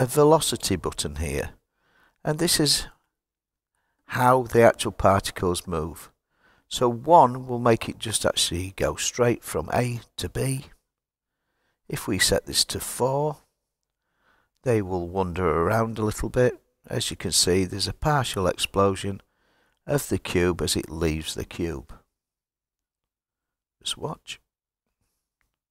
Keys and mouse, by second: 11.7-14.3 drag.